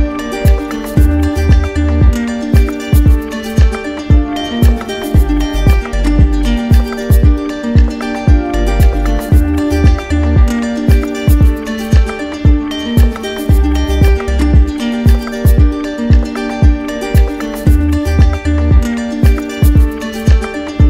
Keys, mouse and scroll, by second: 0.5 click, 1.0 click, 3.7 click, 4.7 click, 7.7-8.8 drag, 11.2-12.3 drag, 14.4-15.5 drag, 16.6 right click, 19.6 click.